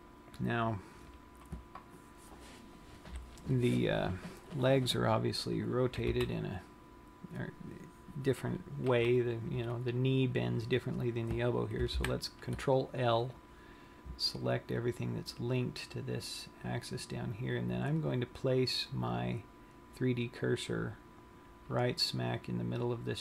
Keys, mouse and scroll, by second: 0.6-1.0 scroll up 4, 6.0 click, 6.9 z, 12.6 ctrl+l, 17.5-20.7 scroll up 7, 20.7 right click, 22.4 scroll down 1.